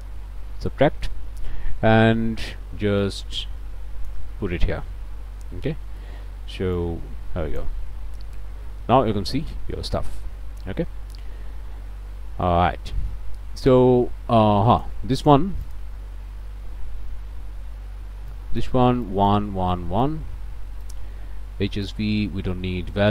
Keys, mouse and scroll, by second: 0.2 scroll up 2, 0.6 scroll down 2, 0.9 click, 3.0-4.3 drag, 5.5 middle click, 6.8-7.8 drag, 8.8-9.3 scroll up 1, 9.9 scroll up 1, 11.2 scroll up 2, 14.7 click, 15.6 click, 18.3 click, 19.1 click, 19.7 click, 20.8 click, 22.9-23.1 drag.